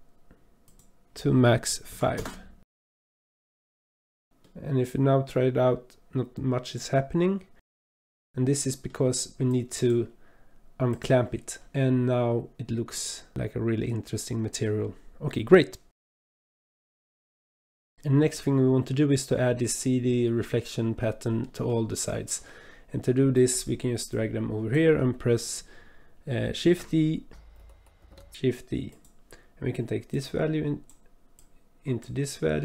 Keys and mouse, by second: 0.6-2.2 drag, 2.8-4.2 middle drag, 4.5-7.7 drag, 8.3 click, 9.6 click, 11.0 click, 11.8-15.8 middle drag, 16.2 middle click, 16.8 middle drag, 17.3 middle drag, 17.7 middle drag, 18.4-19.4 middle drag, 21.5 middle click, 24.1 click, 26.6 shift+d, 27.6 click, 30.1-31.0 drag, 31.4-32.1 drag.